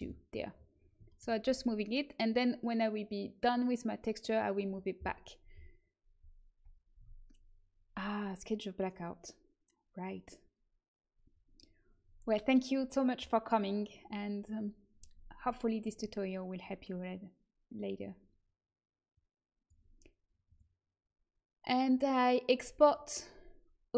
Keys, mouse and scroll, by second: 1.4 a, 6.9 Tab, 15.4 middle click, 19.0-23.9 drag.